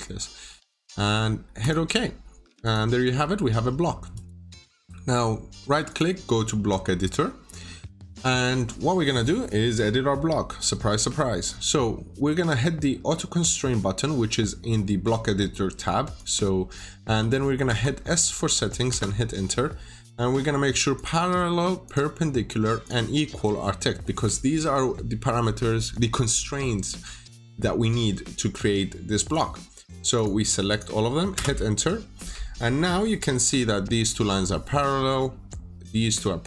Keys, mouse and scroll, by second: 3.2-3.6 scroll up 1, 3.6-3.9 scroll down 1, 4.0 right click, 5.8 click, 8.1-8.6 scroll down 1, 9.5 middle click, 10.2-10.6 scroll up 1, 10.6 middle click, 11.1 scroll down 1, 16.1 click, 17.5 s, 18.8 Return, 20.8 click, 31.2 Return.